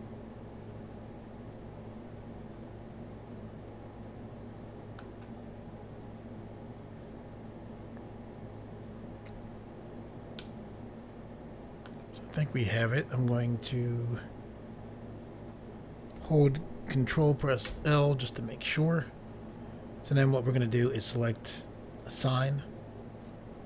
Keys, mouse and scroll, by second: 9.3 i, 10.4 middle click, 17.7 ctrl+i, 22.0 click.